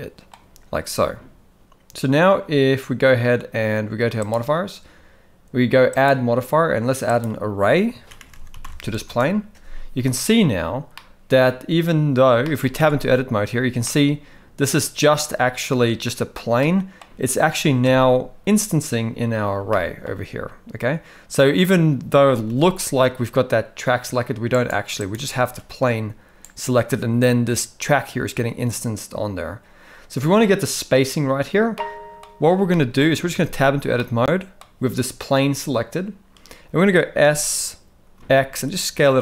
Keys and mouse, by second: 4.2 click, 6.0-9.1 drag, 8.3 r, 11.0-11.4 middle drag, 12.5 shift+middle click, 12.8 Tab, 13.8-15.0 middle drag, 16.6 middle click, 17.8 Tab, 19.7-20.0 shift+middle drag, 22.5 g, 25.3 g, 31.8 middle click, 32.7 shift+middle drag, 33.3 Tab, 34.0 middle click, 37.2 s.